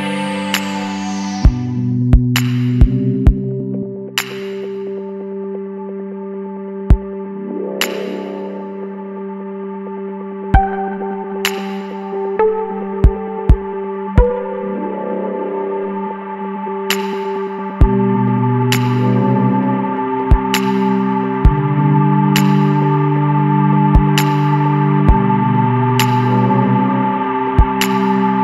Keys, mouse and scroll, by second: 0.6-1.2 scroll down 12, 1.5 scroll down 8, 1.7 middle click, 1.9-3.1 scroll up 1, 3.1 click, 3.6 middle click, 4.1-4.4 scroll up 1, 4.4-9.1 ctrl+middle drag, 9.1 g, 14.3 middle click, 14.7 Tab, 14.9 scroll down 3, 15.1 middle click, 15.4 alt+a, 15.6 middle click, 15.9 scroll up 1, 16.1-16.5 middle drag, 16.5 scroll up 1, 16.7-20.2 middle drag, 20.2 KP_1, 20.9-22.4 middle drag, 22.4-22.8 scroll up 1, 22.8-24.0 middle drag, 24.0 click, 24.4-25.8 middle drag, 25.8 click, 26.4 click, 27.1 click, 27.9 click.